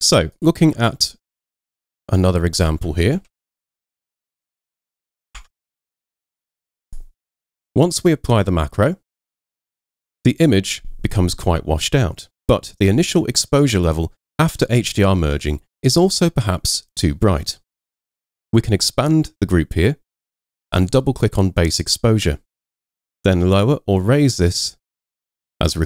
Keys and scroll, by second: 0.8 super+Tab, 1.8 super+Tab, 3.2 super+n, 5.4 super+Tab.